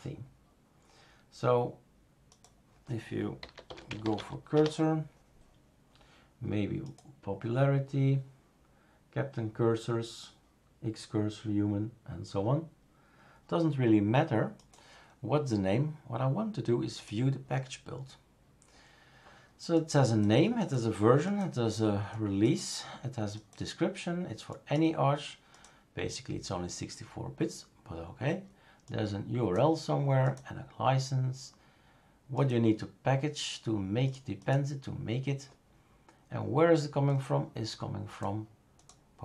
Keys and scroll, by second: 3.2-4.6 typing.